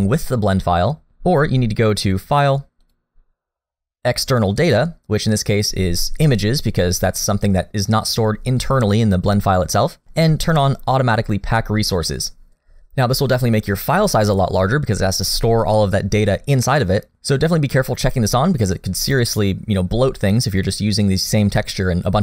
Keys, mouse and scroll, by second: 2.8 click.